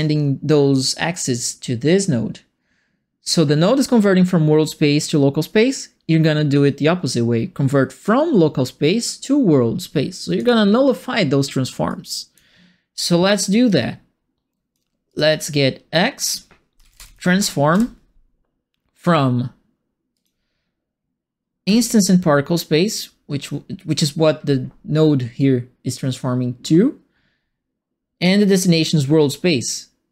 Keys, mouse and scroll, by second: 10.3 click, 11.8 click, 12.9 click, 13.6-14.7 drag, 15.0 click, 15.9 click, 16.5-17.5 typing, 17.7 Return, 20.1 click, 21.6 click, 22.5 click.